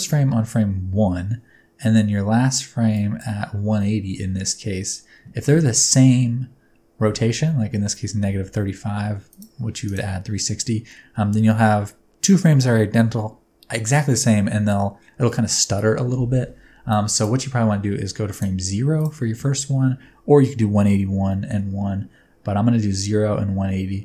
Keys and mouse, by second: 2.9 click, 4.1 n, 9.4 click, 16.9 click, 18.3 click.